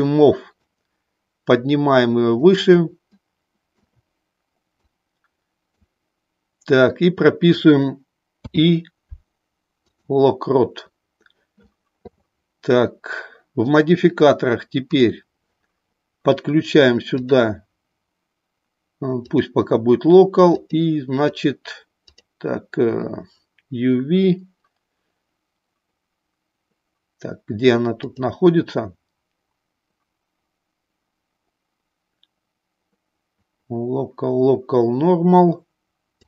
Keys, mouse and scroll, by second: 0.7-2.6 drag, 3.1 shift+middle click, 4.8-5.8 drag, 8.3 i, 14.7 click, 17.1-19.3 drag, 20.4 click, 22.0-23.9 drag, 27.9-33.3 drag.